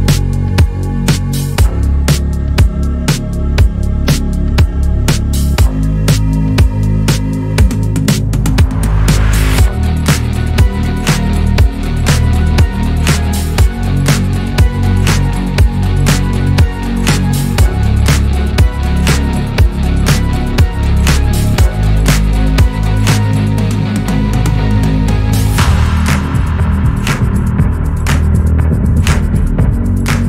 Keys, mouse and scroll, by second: 0.4 3, 0.6 scroll down 1, 0.8 middle click, 1.4 alt+z, 2.1 click, 2.5 click, 3.0 click, 3.7 x, 5.1 Tab, 5.6-6.1 scroll down 3, 6.1 alt+z, 6.6-7.3 middle drag, 7.3 click, 8.0 KP_1, 10.9-11.7 scroll down 4, 11.7-12.4 shift+middle drag, 12.4 click, 12.9-14.7 shift+middle drag, 14.7 Tab, 15.2-16.2 scroll up 2, 16.2-18.9 scroll down 11, 20.2-21.2 scroll up 10, 21.2-22.0 scroll up 4, 22.0-23.1 scroll down 6, 23.1 ctrl+r, 25.0-26.0 scroll up 6, 26.6-27.5 shift+middle drag, 27.5 click.